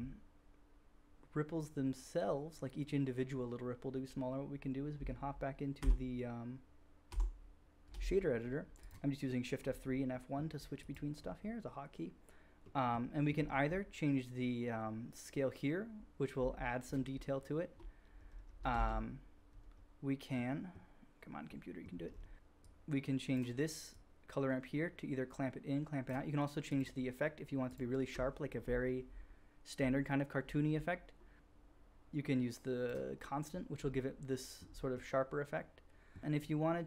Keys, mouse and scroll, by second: 0.0-4.6 drag, 5.4-6.5 shift+drag, 5.7 shift+F3, 7.0 shift+F3, 10.7-19.9 drag, 15.2-19.9 middle drag, 15.2-19.9 right drag, 19.9 ctrl+z, 34.2-36.8 middle drag.